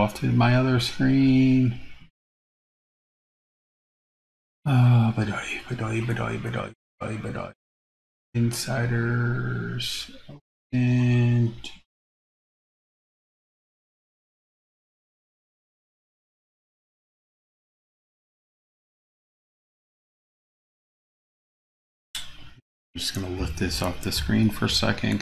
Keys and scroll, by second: 21.8 super+c.